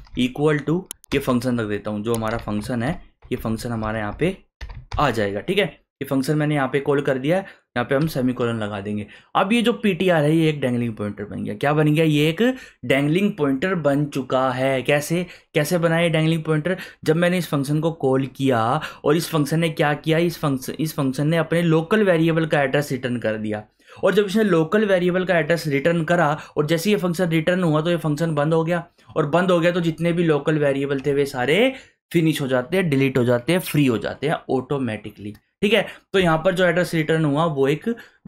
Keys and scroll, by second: 0.0-4.9 typing, 8.0 ;.